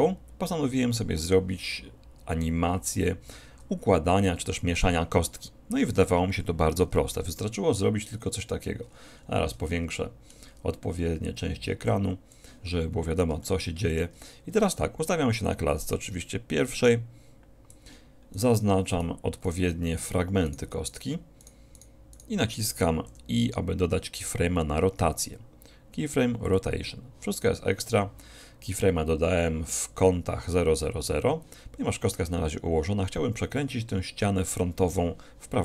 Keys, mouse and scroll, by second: 1.3 click, 7.1 n, 8.9-9.7 scroll up 1, 9.7-11.4 middle drag, 11.9-13.5 drag, 13.5-15.1 middle drag, 15.5-17.2 drag, 18.4-24.0 drag, 23.1 i.